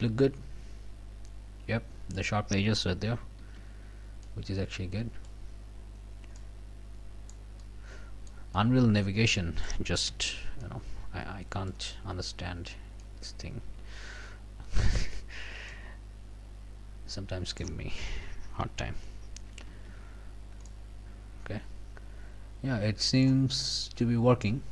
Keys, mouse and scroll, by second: 2.7 scroll down 2, 3.1 scroll up 2, 3.4 f, 4.2-5.5 right drag, 5.8 scroll down 1, 6.4-7.5 middle drag, 7.6 middle click, 8.5-9.8 right drag, 10.1 f, 10.6-11.9 right drag, 11.9 scroll up 2, 12.4 scroll down 2, 13.0-15.0 right drag, 15.0 scroll down 2, 15.7-17.8 right drag, 19.0 w, 19.9 scroll up 1, 20.3 scroll down 1, 20.7-23.4 drag, 23.6 scroll up 1, 24.3 scroll down 1.